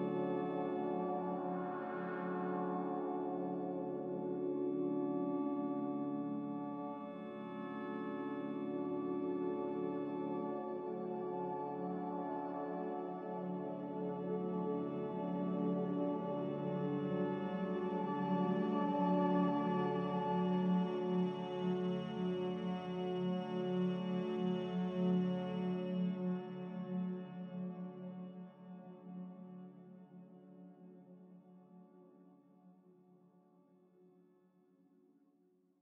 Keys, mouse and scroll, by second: 2.6 a, 8.7 2, 9.8-10.7 typing, 13.6 Delete, 15.6 Escape, 18.1 typing, 18.3 Return, 19.1 Return, 30.4 z.